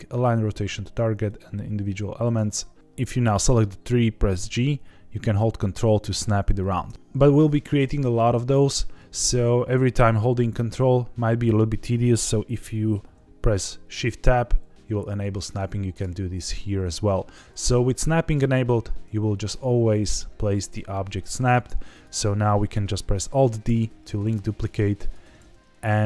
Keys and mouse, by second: 2.8 Escape, 3.2 click, 4.3 g, 6.5 ctrl+click, 14.1 shift+Tab, 15.4 click, 15.9 click, 17.9 g, 21.9 click, 23.6 alt+d, 25.0 click, 25.3 alt+d, 26.0 click.